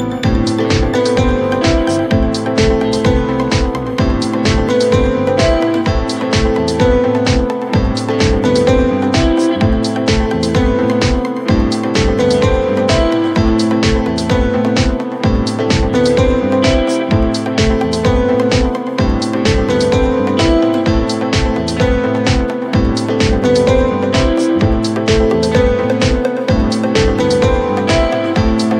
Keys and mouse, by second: 1.0-2.5 alt+drag, 4.8-6.4 alt+drag, 6.8 alt+x, 8.4 alt+click, 9.1 alt+x, 10.6 alt+middle drag, 12.6 click, 13.6 click, 14.5 click, 14.9 2, 15.9 click, 16.7 click, 17.1 w, 17.6 click, 19.4 4, 19.6 click, 20.0-20.9 drag, 21.9 alt+middle click, 26.4 3.